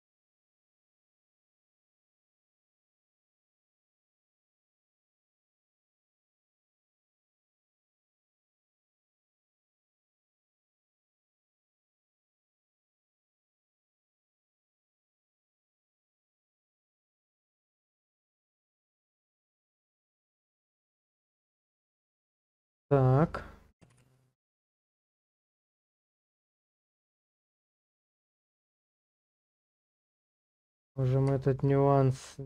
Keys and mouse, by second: 1.4 shift+middle click, 3.2 click, 7.5 shift+middle click, 11.2 middle click, 12.7 shift+click, 14.1 ctrl+click, 15.9 shift+click, 20.1 shift+click, 23.9 Page_Down, 26.8 click, 27.0 middle click, 28.6 click, 28.9 middle click, 29.5 shift+middle click, 29.9 click, 30.2 Tab, 31.4 shift+middle click.